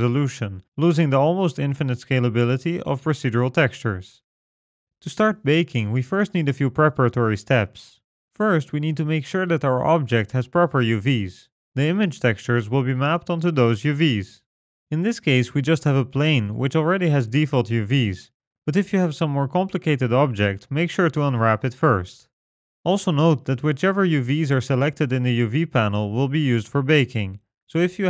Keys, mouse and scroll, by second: 10.5 click, 11.8 click, 14.5 click, 17.3 scroll up 1, 17.5 Tab, 26.1 click, 27.7 click.